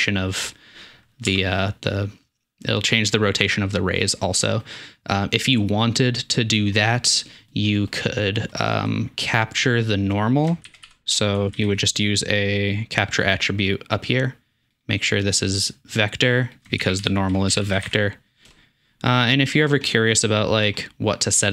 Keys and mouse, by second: 1.3 Tab, 6.9 click, 9.2 drag, 10.5-14.9 shift+drag, 10.6 shift+a, 16.6-21.5 shift+drag, 16.8 shift+a.